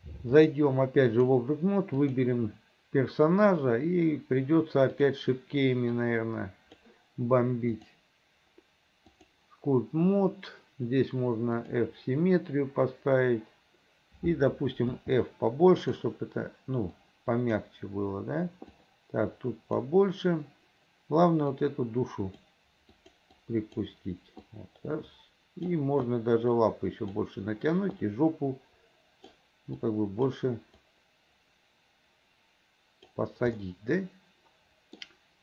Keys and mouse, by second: 0.5 click, 2.1 click, 6.1 click, 7.8-9.5 drag, 11.8-15.0 drag, 15.0 f, 17.1 click, 18.8-19.9 drag, 21.6 click, 23.1 click, 23.5 click, 24.6-25.8 drag, 26.2-27.3 drag, 28.1-29.5 drag, 29.9 click, 30.9-33.3 drag, 33.7-35.1 drag.